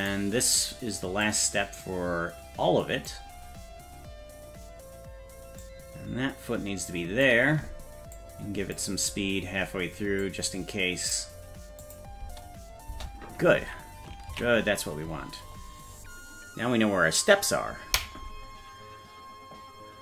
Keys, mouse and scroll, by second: 0.1-1.2 right drag, 1.2-3.1 drag, 5.6-7.2 drag, 8.1 click, 9.1-10.2 scroll down 2, 10.2 click, 11.8 click, 12.2 space, 14.4 ctrl+s, 15.1-16.1 scroll up 5.